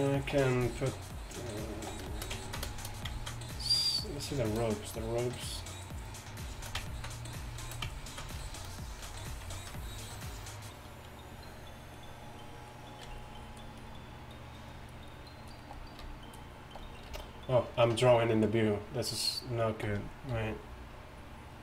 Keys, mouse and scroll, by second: 0.6-1.9 d, 2.2 middle drag, 13.1-17.2 typing, 13.3 click, 15.8-16.9 middle drag, 19.8 d, 19.9 d, 20.4 t.